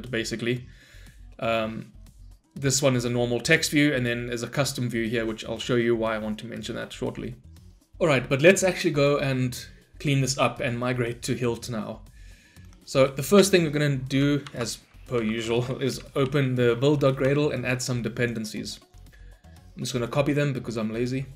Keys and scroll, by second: 14.5 ctrl+shift+n.